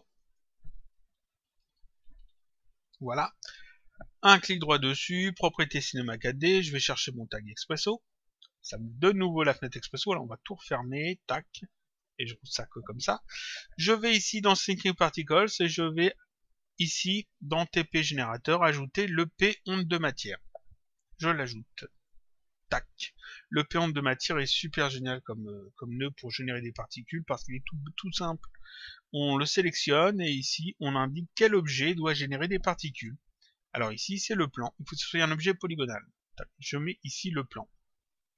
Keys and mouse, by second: 0.0 click, 0.9-2.5 typing, 2.7 Return, 4.5 right click, 8.2 click, 11.0 ctrl+click, 15.0 click, 18.0 click, 19.5 click, 22.0 click, 23.8 click, 29.4 click, 34.7 click.